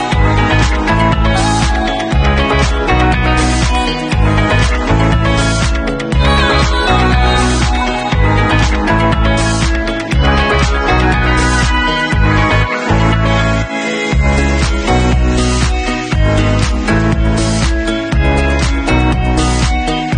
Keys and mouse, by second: 3.3-4.6 middle drag, 4.6-6.6 alt+drag, 6.6-14.9 middle drag, 12.5 ctrl+s, 14.9-15.9 drag, 15.9-19.7 ctrl+middle drag, 16.4 ctrl+s, 19.7 click.